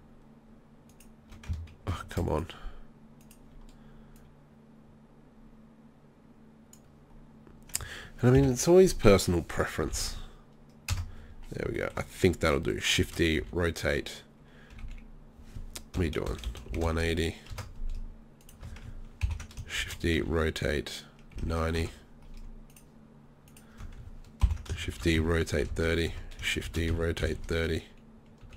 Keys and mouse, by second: 1.9 ctrl+z, 8.4 ctrl+l, 9.8 r, 13.0 shift+d, 18.4 right click, 19.2 ctrl+l, 19.8 shift+d, 24.4 ctrl+l, 24.9 shift+d, 26.7 shift+d.